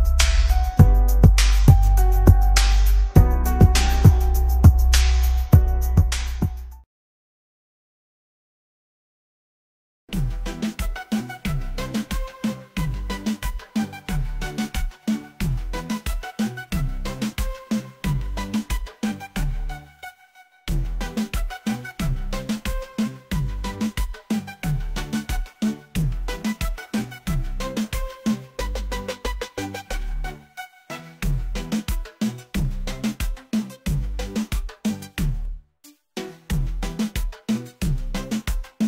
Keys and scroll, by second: 5.6-7.3 typing, 13.7 4, 14.5 ., 15.7 9, 16.4 4, 19.2-21.3 typing, 22.7 Return, 29.5 ctrl+c, 32.2 ctrl+v, 38.2 shift+y.